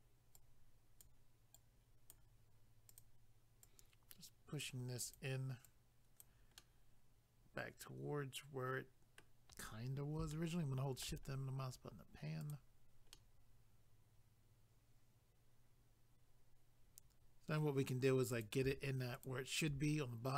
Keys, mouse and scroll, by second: 0.4 click, 1.6 click, 2.9 click, 3.6 click, 5.0 click, 5.7 click, 6.6 middle click, 10.3 shift+middle click, 11.3-12.4 scroll up 1, 12.4 click, 13.1 middle click, 18.3 click.